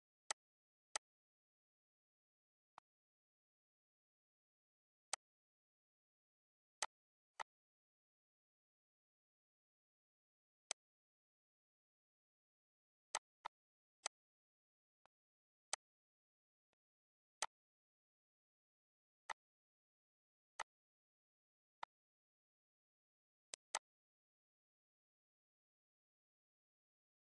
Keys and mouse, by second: 1.2 click, 3.4 click, 4.7 click, 5.2 click, 5.8 ctrl+s, 5.9 ctrl+s, 8.6 click, 11.3 click, 12.2 click, 13.2 click, 13.9 click, 14.8 click, 15.4 click, 17.3 click, 18.5 click, 19.8 click, 21.5 click, 23.5 ctrl+s.